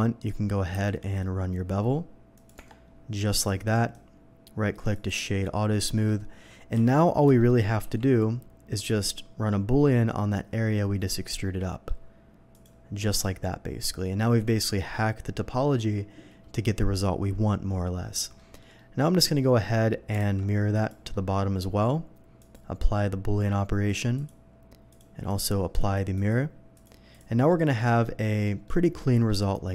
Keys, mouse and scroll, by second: 0.7 ctrl+b, 2.3 click, 2.5 Tab, 3.3 middle click, 3.7 right click, 4.9 click, 5.5-6.0 middle drag, 7.4 shift+middle drag, 7.4 shift+KP_3, 7.8 d, 8.9-11.1 drag, 11.3-11.9 middle drag, 12.5 click, 12.9 scroll down 1, 13.1-14.0 middle drag, 14.2 scroll up 1, 17.1 scroll up 1, 18.0 scroll down 1, 18.4 middle drag, 18.8 middle drag, 19.4 middle click, 20.2 alt+x, 20.7 alt+x, 20.7 click, 21.1-21.5 middle drag, 22.4 click, 23.8 click, 24.1 click, 24.9 click, 25.3 click, 25.8 click, 26.1 click, 26.7 click, 27.1 click, 27.5-28.4 middle drag, 28.6-29.2 middle drag.